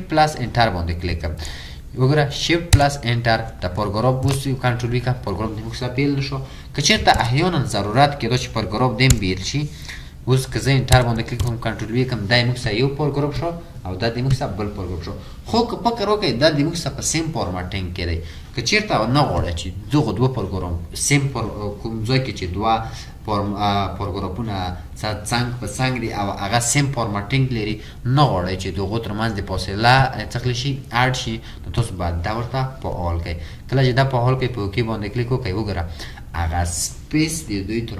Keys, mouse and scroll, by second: 2.8 shift+Return, 4.6 typing, 9.1 BackSpace, 11.0 Return, 11.7 typing.